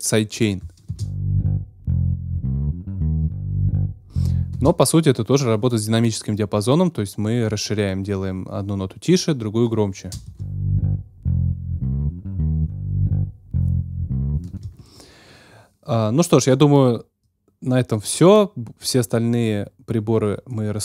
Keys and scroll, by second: 0.9 space, 4.5 space, 10.2 space, 14.4 space.